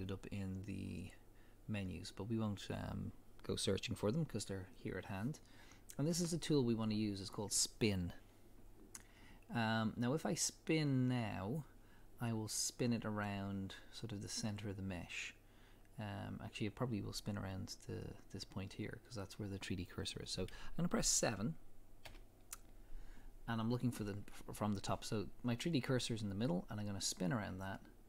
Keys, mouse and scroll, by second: 22.0-26.1 drag, 22.0 KP_7.